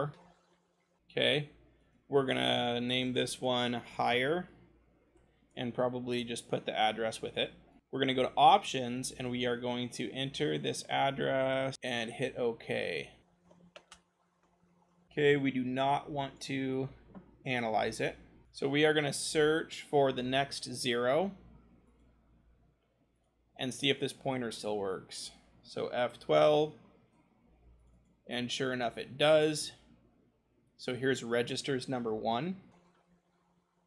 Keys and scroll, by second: 0.3 Down, 2.4-5.1 typing, 6.8 ctrl+v, 7.8 Left, 7.8 BackSpace, 11.7 BackSpace, 19.1 s, 20.3 0, 28.8-29.2 scroll, 32.4-33.8 typing.